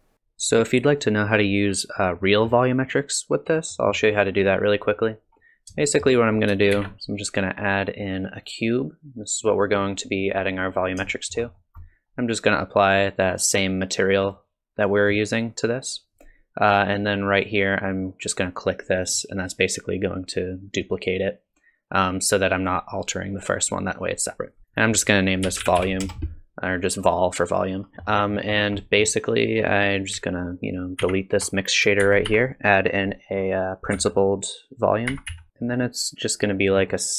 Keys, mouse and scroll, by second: 0.1 scroll down 2, 2.2 middle click, 3.7 middle click, 5.3-5.7 scroll up 1, 5.8 shift+middle click, 6.7 shift+a, 9.3 click, 11.1 shift+middle click, 11.6-12.2 scroll down 1, 13.3 click, 19.0 click, 24.7 click, 27.9 scroll up 1, 27.9 scroll down 2, 28.1 middle click, 28.3-28.8 scroll down 3, 28.8 middle click, 29.5 click, 31.1 ctrl+x, 32.0 shift+a, 36.0 click, 36.8-37.1 scroll up 6.